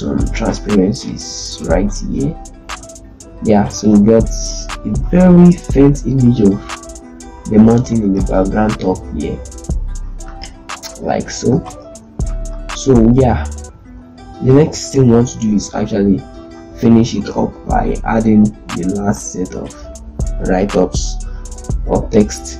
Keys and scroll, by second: 3.5 ctrl+space, 3.8 ctrl+z, 7.5 ctrl+space, 9.9 z, 11.4 ctrl+space, 14.3 shift+F2, 17.3 F4.